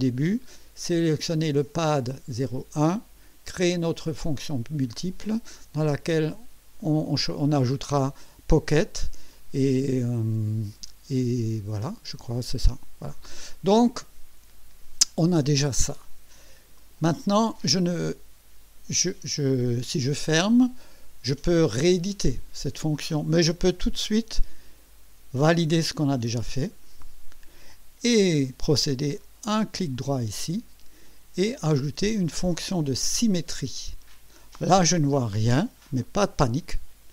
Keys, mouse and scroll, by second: 16.7 click, 26.2 click, 29.2 right click, 33.1 click.